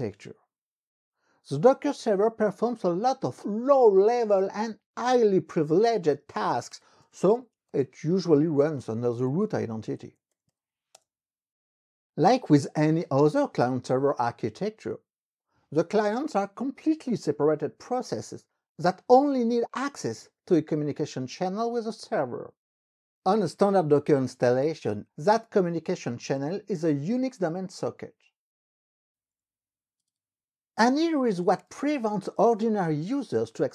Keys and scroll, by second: 6.6-11.1 typing, 30.2 alt+Tab, 30.9-33.7 typing.